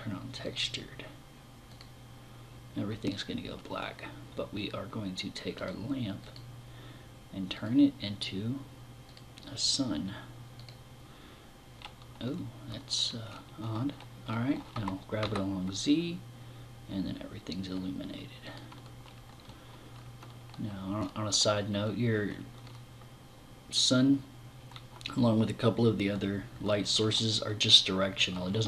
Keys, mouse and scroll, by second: 5.0 click, 5.6 click, 6.9 click, 8.5 click, 9.0 click, 10.3 click, 14.1 g, 18.0 click.